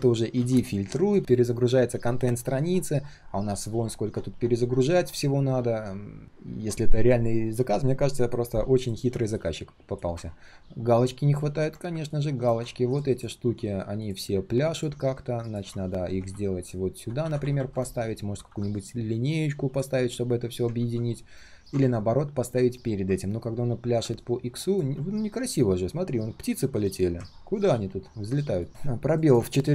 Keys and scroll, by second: 0.3 ctrl+z, 15.7 alt+h, 20.7 ctrl+z.